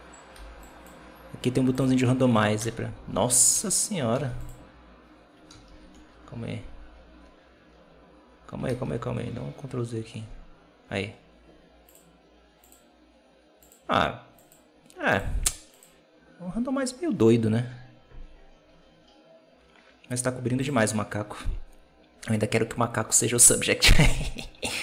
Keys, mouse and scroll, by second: 0.2 b, 1.6-2.5 drag, 2.5 KP_0, 3.4 alt+a, 4.0 z, 4.7-5.9 scroll up 1, 5.9 ctrl+z, 7.2 ctrl+z, 7.3 scroll up 1, 7.6-10.0 scroll down 2, 10.1 ctrl+z, 10.2-11.1 scroll up 3, 11.7-18.8 drag, 20.4 x, 23.3 Right, 24.2-24.8 drag.